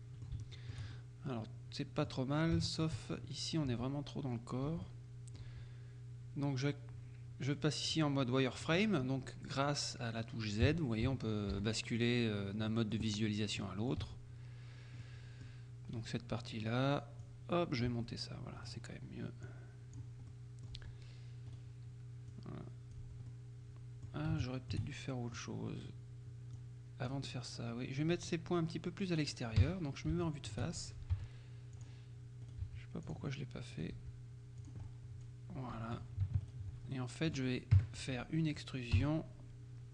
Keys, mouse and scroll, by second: 0.6 shift+middle click, 2.6 shift+middle click, 3.1-3.7 shift+scroll up 3, 3.8 z, 4.8 z, 4.9-6.0 drag, 5.5 z, 7.9 click, 8.6 click, 10.7 z, 12.8 middle click, 13.7 middle click, 14.1 z, 15.1 middle click, 16.0 click, 16.0 right click, 17.3-18.4 drag, 18.0 z, 18.7 right click, 19.6-20.6 drag, 20.4 right click, 20.8 z, 21.6 right click, 22.4-23.5 drag, 23.1 z, 23.4 right click, 24.5 shift+middle click, 25.0 shift+middle click, 26.6-27.6 drag, 28.3 right click, 29.6 KP_1, 30.3 shift+click, 31.2 g, 31.8 click, 32.6 right click, 32.7 g, 33.1 click, 33.8 right click, 34.0 g, 34.7 click, 35.0 right click, 37.0 alt+shift+middle click, 37.8 KP_1, 39.0 e.